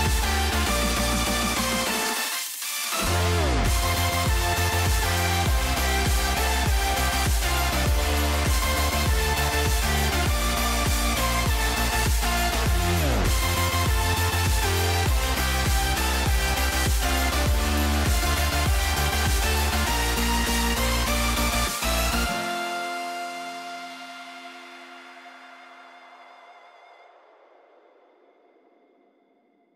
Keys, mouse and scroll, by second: 0.3-1.5 drag, 3.2-4.3 drag, 4.8 click, 6.5 click, 8.1 click, 10.6 click, 13.5 click, 16.0-17.5 drag, 18.1-19.2 drag, 20.5 click, 21.6-22.7 drag, 22.9-24.8 drag, 26.7 click, 27.1 ctrl+s, 28.1 shift+middle click, 28.8 shift+middle click.